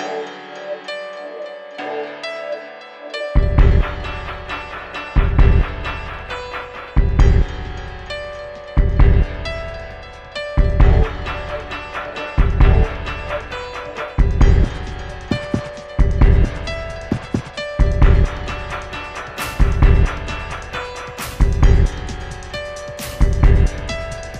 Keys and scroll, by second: 5.5 1, 5.6 Return, 7.9 2, 10.9 Return, 15.1 1, 15.2 Return, 19.4 Left, 19.5 Left, 19.7 Left, 21.6 Left, 21.7 Left, 21.8 Left.